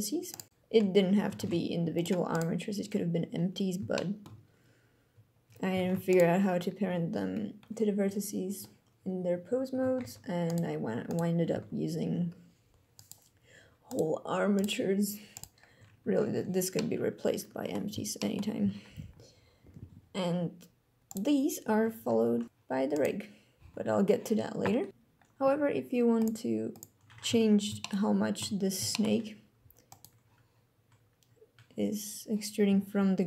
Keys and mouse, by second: 0.3 click, 0.5 r, 1.3 ctrl+Tab, 3.9 shift+click, 5.8 ctrl+Tab, 6.1 click, 10.0 ctrl+Tab, 11.1 click, 11.5 alt+a, 12.9 click, 13.9 click, 14.6-15.8 drag, 16.7-17.7 middle drag, 18.1 shift+drag, 18.6 alt+a, 23.7 alt+a, 26.1 click, 26.7 click, 27.2 KP_3, 27.8-28.7 shift+drag, 28.9 shift+click, 29.9 click, 32.6 g.